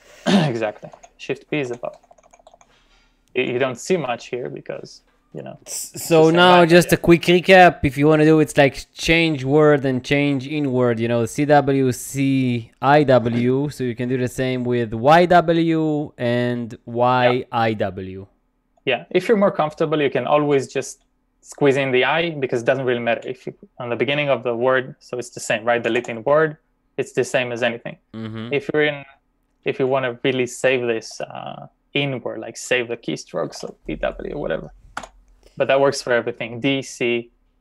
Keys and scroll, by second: 1.0-2.5 typing, 6.1-7.2 typing, 13.5 typing, 25.6-26.6 typing, 27.7 u, 33.5 typing, 34.7-35.5 typing.